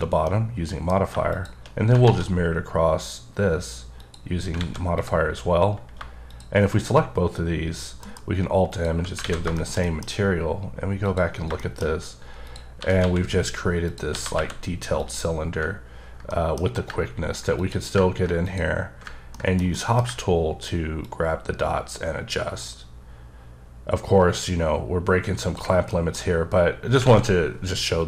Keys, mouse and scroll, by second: 0.2 middle click, 1.3 shift+click, 1.7 scroll down 2, 2.0 alt+x, 4.0 click, 4.5 a, 4.9 click, 5.3 scroll up 2, 6.3 shift+click, 8.0 alt+m, 8.7 click, 9.2 alt+a, 9.5 middle click, 9.8 double middle click, 11.0 click, 11.6 shift+middle click, 11.8 shift+scroll up 2, 12.5 click, 12.7 g, 13.0 x, 13.8 click, 14.1 g, 14.5 y, 14.9 click, 15.3 scroll down 2, 16.3 middle click, 17.6 click, 18.4 click, 19.3 ctrl+middle click, 19.7 middle click, 21.0 ctrl+click, 25.9 middle click, 26.2-26.8 scroll up 2, 27.0 alt+scroll up 1, 27.0 alt+a.